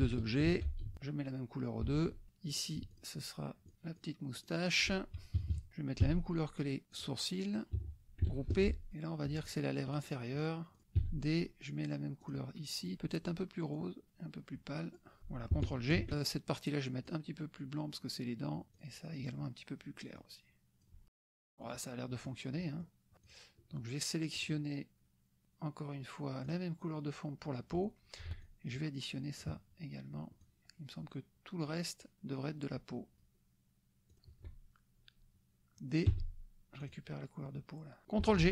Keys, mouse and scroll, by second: 0.5 ctrl+g, 0.9 ctrl+d, 1.0 ctrl+click, 1.9 F1, 2.5 click, 2.9 shift+click, 3.7 shift+drag, 4.0 shift+click, 4.4-4.9 shift+drag, 5.4 KP_Subtract, 6.0 d, 6.9 click, 7.8 F1, 8.7 ctrl+g, 9.0 click, 9.5 shift+click, 9.9 shift+click, 10.6 shift+click, 11.0 d, 12.2 click, 13.7-15.1 drag, 15.2 F1, 17.2-18.7 drag, 18.9 click, 20.2 click, 21.1 KP_Subtract, 21.5 click, 22.3 click, 22.6 click, 23.5 click, 24.4 click, 26.4 click, 27.6 click, 28.5-29.6 shift+drag, 30.4-33.3 shift+drag, 36.2 d, 36.8 click, 38.4 ctrl+g.